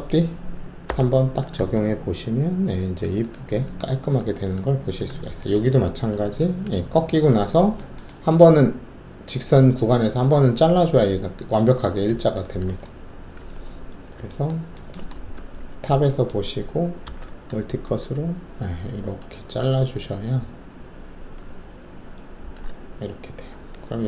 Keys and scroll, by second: 0.8 3, 6.3 alt+1, 13.3 alt+shift+3, 15.3 alt+shift+2, 17.0 alt+s, 23.3 shift+w.